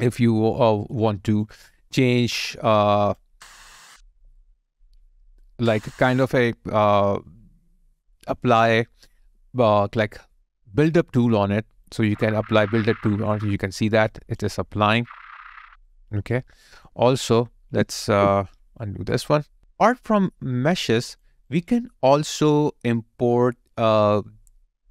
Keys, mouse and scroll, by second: 1.0 ctrl+right click, 1.5 ctrl+click, 4.4 alt+right click, 13.6 alt+right click, 14.1 alt+click, 15.9 ctrl+right click, 17.5 ctrl+z, 18.8 alt+right click, 19.4 alt+click, 20.8 alt+click, 23.0 alt+right click.